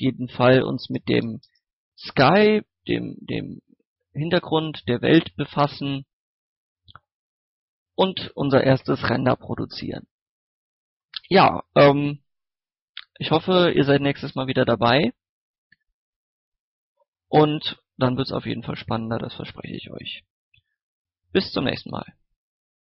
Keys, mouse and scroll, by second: 4.5 click, 6.2 scroll down 1, 6.3 scroll up 1, 6.6-6.9 scroll down 1, 6.9-9.1 middle drag, 9.7 scroll up 1, 9.9-16.3 middle drag.